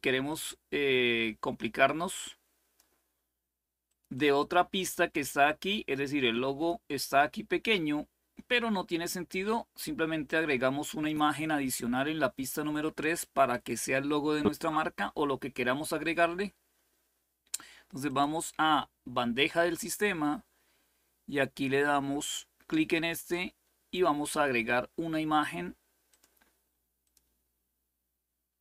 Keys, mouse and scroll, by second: 0.0-3.3 drag, 3.6 click, 3.9 click, 5.2-7.2 drag, 10.0-11.4 drag, 13.2 click, 17.8 click, 22.9 click, 25.8 click, 26.8 click.